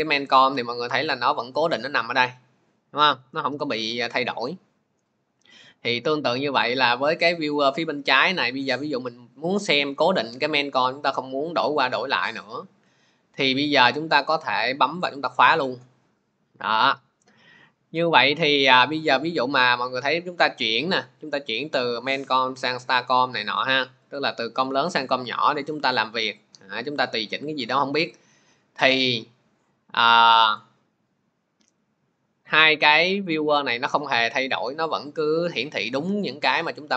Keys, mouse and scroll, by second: 6.5 click, 8.6 click, 12.1 click, 12.8 click, 15.0 click, 19.3 click, 19.9 click, 21.2 click, 22.0 click, 23.1 click, 23.5 click, 24.1 click, 24.6 click, 25.1 click, 25.5 click, 26.2 click, 26.9 click, 27.4 click, 28.0 click, 30.4 click, 33.6 click, 36.5 click.